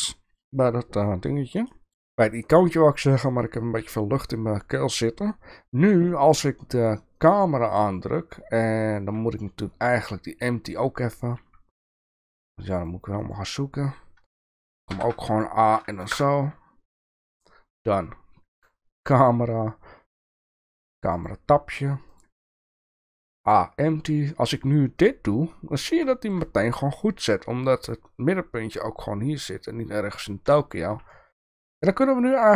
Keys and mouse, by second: 1.7 shift+middle click, 7.2 click, 12.8-17.0 drag, 18.5 click, 21.2-21.5 drag, 22.1-25.0 drag, 26.0 shift+middle drag, 31.1-31.4 shift+middle drag, 32.3-32.5 shift+middle drag.